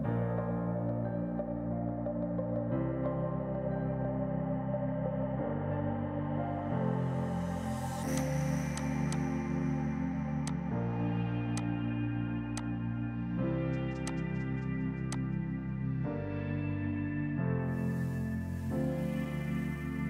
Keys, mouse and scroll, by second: 2.6 d, 5.0 space, 5.7 F5, 8.1 click, 11.9-13.2 typing, 12.6 click, 14.0 click, 14.6 b, 15.1 click, 17.0-17.7 typing.